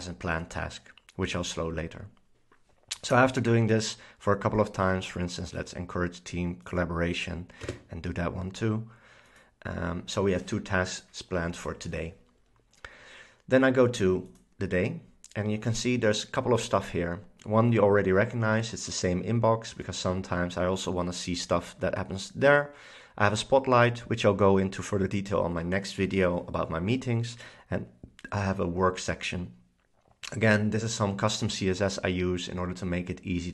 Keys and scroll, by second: 7.7 space.